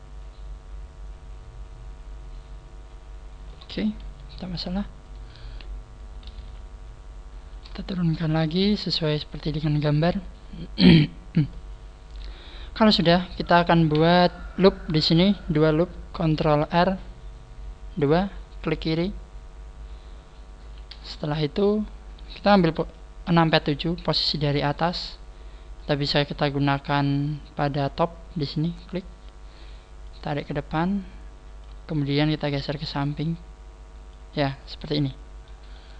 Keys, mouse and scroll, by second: 3.7-4.2 scroll down 4, 4.0 KP_1, 4.8-5.6 scroll up 3, 5.1 right click, 6.4 z, 7.5 right click, 7.9 shift+right click, 8.5 click, 10.0 right click, 10.6 click, 12.1 scroll down 3, 14.0 z, 18.6 click, 20.8-22.5 scroll down 4, 23.2 KP_7, 25.8 click, 29.1 scroll up 3, 30.0 click, 30.0 scroll up 1, 34.8 middle click.